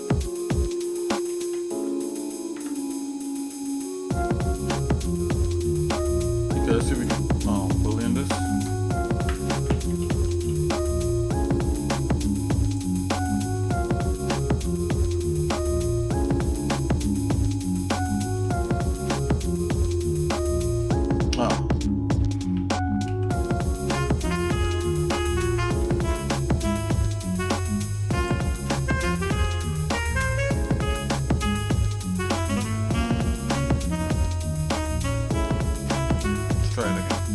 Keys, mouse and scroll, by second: 1.5 alt+m, 2.5 Tab, 3.0 middle click, 3.5 shift+middle click, 4.3 shift+middle click, 5.0 shift+middle click, 6.9 shift+click, 8.5 space, 10.1 o, 13.7 shift+middle click, 15.0 Tab, 15.7 shift+middle click, 16.6 scroll up 1, 17.1 shift+middle click, 17.9 shift+middle click, 18.9 scroll up 1, 19.4-19.8 scroll down 2, 19.9 shift+middle click, 21.7 ctrl+z, 22.5 ctrl+z, 23.1 ctrl+z, 24.1 click, 25.8 g, 28.2 shift+click, 30.2 click, 32.2 j, 33.1 middle click, 33.8 g, 36.1 shift+click.